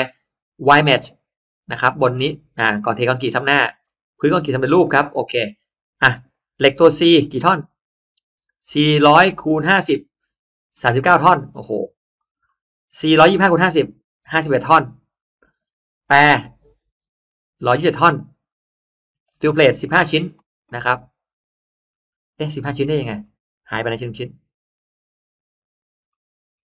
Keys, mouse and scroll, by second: 0.5 click, 3.7 click, 7.1 click, 12.4 click, 16.3 click, 19.2 click, 22.3-22.6 scroll down 2, 22.6 middle click, 23.3-23.7 scroll down 2, 23.8 middle click, 24.0 scroll down 2, 24.3 scroll up 1, 25.6-26.0 scroll up 1, 26.0 middle click.